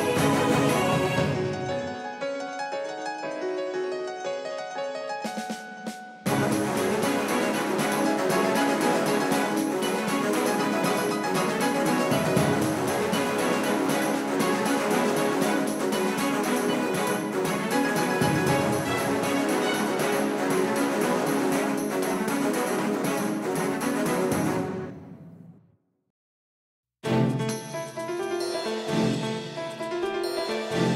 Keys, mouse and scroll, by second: 3.0 Tab, 3.9-6.4 right drag, 4.8-7.1 drag, 6.4-8.4 middle drag, 9.9-16.3 middle drag, 11.1-15.1 right drag, 13.5-15.8 drag, 16.9 Tab, 20.0-22.2 drag, 21.2 Tab, 21.8 Tab, 22.5-24.8 middle drag, 24.2 KP_5, 24.8 KP_1, 25.6 KP_5, 27.4 middle click, 29.7-30.9 middle drag, 30.8 s.